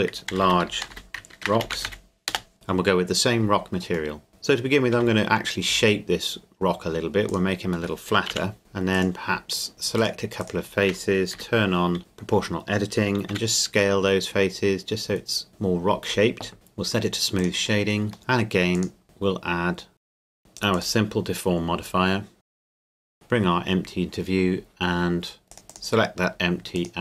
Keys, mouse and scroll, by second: 0.3-1.9 typing, 2.3 Return, 4.3 middle click, 4.9 s, 5.7 z, 7.3 click, 7.9 middle click, 8.3 KP_Decimal, 8.6 Tab, 8.9 right click, 10.0 shift+right click, 11.3 o, 13.3 s, 15.5 middle click, 17.4 click, 18.1 middle click, 18.7 click, 20.1 click, 20.4 click, 20.8 click, 22.4 scroll down 1, 22.5 right click, 22.7 h, 22.9 g, 23.0 click, 23.5-25.3 scroll up 1, 25.5 right click, 25.7 click.